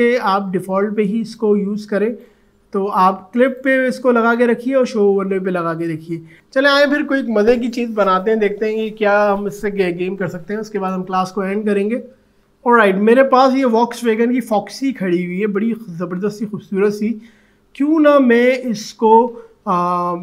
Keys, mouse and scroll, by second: 1.3-3.4 drag, 12.4 click, 14.4 alt+scroll up 1, 15.7-16.4 alt+scroll down 1, 16.4 alt+scroll up 1.